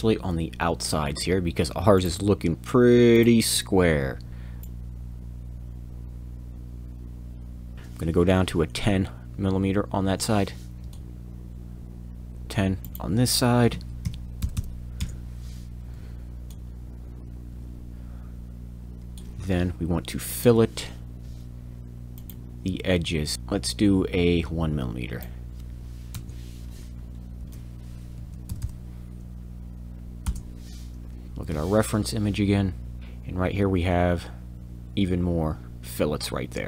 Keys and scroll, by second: 4.3 f, 12.3 f, 13.7 1, 14.0 o, 14.4 m, 20.4 f, 20.4 f, 28.2 1, 28.2 1, 28.5 m, 30.2 Return.